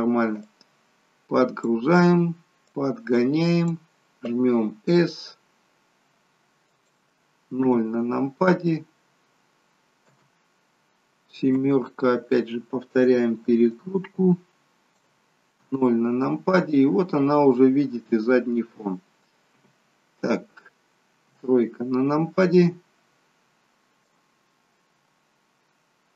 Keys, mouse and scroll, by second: 0.5 click, 2.8 click, 4.6 s, 7.7 KP_0, 10.2 KP_0, 11.5 KP_7, 13.8 click, 15.7 KP_0, 19.7 KP_0, 21.3 KP_3, 24.3 click.